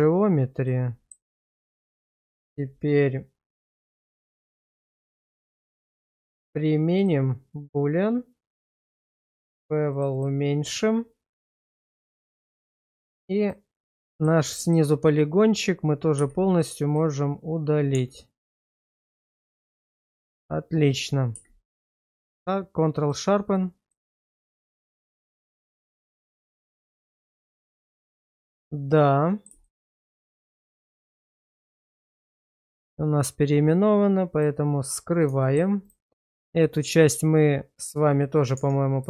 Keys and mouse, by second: 0.7-1.1 middle drag, 1.5 middle drag, 1.9 middle drag, 2.4 middle click, 4.4 click, 5.2 click, 6.5-7.1 drag, 8.5 click, 9.9 click, 10.1 click, 12.9 Tab, 13.4 click, 14.1 middle click, 14.5 middle click, 16.2 x, 17.9 Tab, 18.7 middle drag, 19.1 shift+middle drag, 19.8 shift+middle click, 22.0 q, 23.9-24.8 middle drag, 25.4 Tab, 26.2 shift+middle click, 27.0 middle click, 28.1 Tab, 29.0 middle click, 29.6 shift+middle click, 30.4 /, 31.7 middle click, 34.3 click, 35.4 shift+middle click, 38.5 Tab.